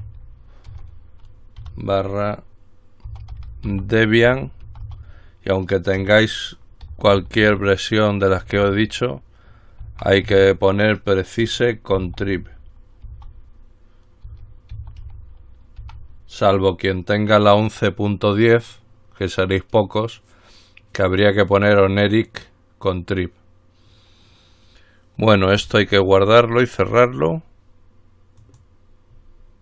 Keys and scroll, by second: 0.0-1.8 typing, 3.0-13.2 typing, 14.5-17.8 typing.